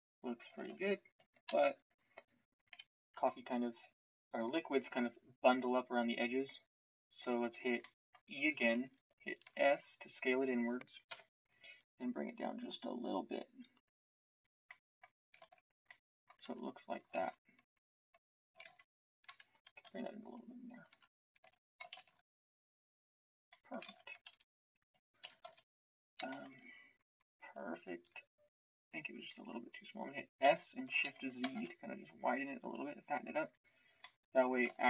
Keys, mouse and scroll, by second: 1.4 KP_1, 11.1 KP_1, 16.4 Tab, 17.1 shift+z, 18.6 shift+z, 19.2 Tab, 19.8 s, 20.8 Tab, 21.4 z, 22.0 shift+z, 23.8 shift+z, 25.2 KP_1, 25.4 KP_Decimal, 28.0 s, 30.4 s.